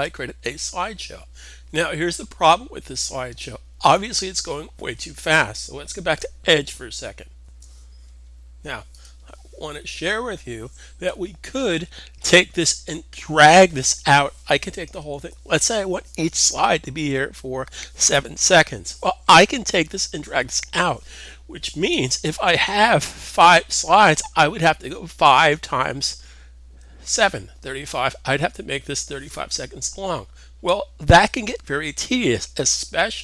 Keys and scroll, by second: 0.4 super+r, 7.4 alt+super+Tab, 15.0 super+a.